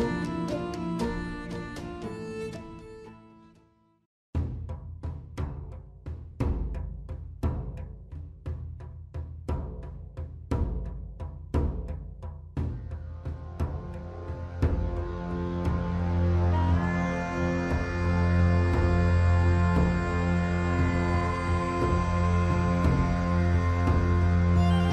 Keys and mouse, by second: 3.3 ctrl+z, 4.6 ctrl+z, 6.2 shift+click, 8.4 shift+middle click, 10.1-11.8 shift+drag, 12.3 shift+click, 13.7-14.7 shift+drag, 15.4 shift+middle click, 19.1-20.5 shift+drag, 20.8-21.8 shift+drag, 23.1 shift+click.